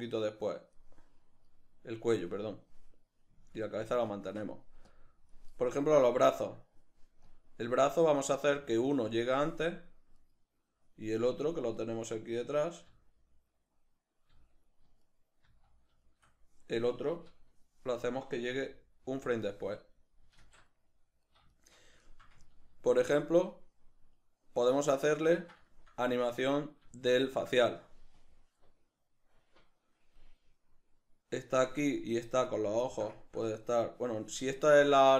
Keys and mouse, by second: 1.6 right click, 3.6-4.9 shift+middle drag, 4.9-6.4 drag, 6.4 right click, 7.3-9.2 drag, 8.4 g, 9.0 g, 10.3 right click, 12.9 z, 13.7-15.1 middle drag, 14.3 z, 15.1 right click, 15.5 z, 16.1-19.3 shift+middle drag, 18.6 g, 19.3 click, 20.4 alt+q, 21.5-25.1 shift+middle drag, 25.1 right click, 25.4-28.2 ctrl+shift+middle drag, 28.2-32.5 drag, 32.5 right click, 32.9-35.1 ctrl+shift+middle drag.